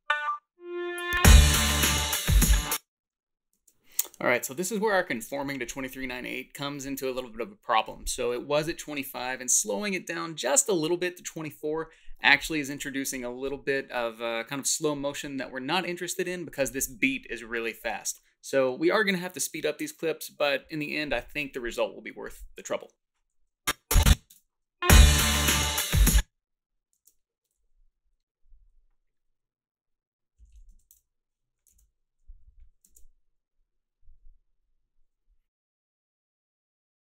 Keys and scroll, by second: 2.5 space, 3.0 space, 24.3 space, 26.1 space, 30.1-31.4 typing, 36.1-36.9 typing.